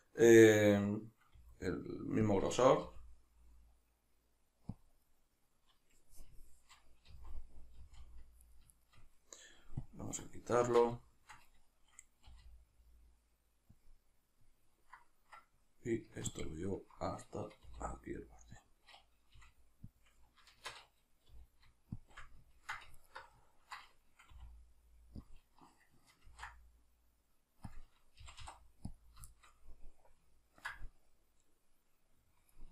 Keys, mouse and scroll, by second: 1.4 r, 2.4 click, 2.9 g, 4.9 click, 7.1 z, 8.4 right click, 8.8 shift+right click, 9.8-10.7 drag, 10.7 shift+Tab, 11.1-12.3 shift+middle drag, 12.3 r, 13.9 click, 16.3-17.6 ctrl+drag, 17.6 r, 18.7 click, 19.4 g, 20.0 click, 20.6 shift+Tab, 21.3 g, 22.1 shift+click, 22.5 ctrl+middle click, 22.9-23.4 alt+right drag, 23.4-25.3 ctrl+middle drag, 24.3 r, 25.3 click, 26.3 ctrl+b, 27.7 click, 28.2 g, 28.9 click, 29.3-32.7 shift+middle drag.